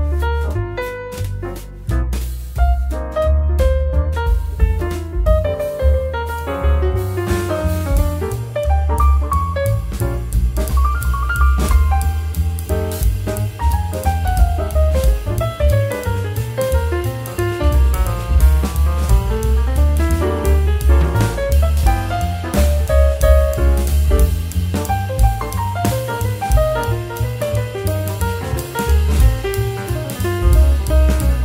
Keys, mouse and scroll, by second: 0.3 click, 1.3 s, 2.6 g, 3.7 s, 4.4 middle click, 5.3 scroll up 3, 5.6 middle click, 6.4 click, 7.0 Tab, 7.4 click, 8.3 click, 9.2 |, 12.4 Tab, 12.6-13.0 middle drag, 13.0-14.0 scroll down 2, 14.0 shift+d, 18.1 click, 18.4 middle click, 19.1 click, 19.5 Tab, 19.7-20.7 scroll up 6, 20.7 click, 22.1 g, 25.3 click, 25.7 shift+click, 26.2 shift+drag, 26.5 shift+click, 27.2 s, 29.9 click, 30.4 shift+click, 31.0 g.